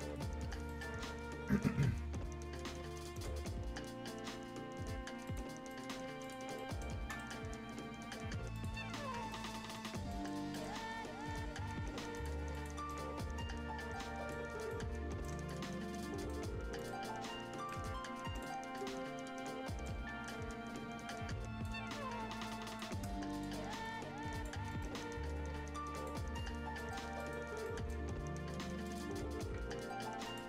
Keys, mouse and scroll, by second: 0.4 scroll down 1, 0.6 right click, 0.9 scroll up 1, 3.1 click, 3.7-4.1 scroll up 1, 5.2 click, 5.2 click, 5.5-6.2 scroll down 2, 5.7 right click, 6.2 click, 6.5 right click, 6.9 scroll down 1, 7.0 right click, 7.3-7.8 scroll up 1, 8.5 click, 8.7 scroll down 1, 9.3 right click, 9.7 click, 10.1 right click, 10.3 scroll down 1, 10.5 right click, 10.7-11.1 scroll up 1, 12.1 click, 13.2-14.4 right drag, 14.4 scroll down 1, 14.7-16.0 right drag, 16.7 click, 17.1 scroll up 1, 17.1 scroll down 1, 17.3 scroll up 1, 17.6 right click, 18.0-18.3 scroll up 1, 18.3 click, 18.5 scroll down 1, 18.7 right click, 19.9 scroll up 1, 20.2-21.7 right drag, 21.7 scroll down 1, 22.6 click, 22.6 scroll up 1, 22.7 click, 23.7 middle click, 24.3 click, 24.7-25.9 scroll up 1, 25.9 click, 26.2-26.7 scroll up 1, 26.7 right click, 26.9 scroll down 1, 27.1 right click, 28.8 click, 28.8 click, 29.1 scroll up 1, 30.2 click.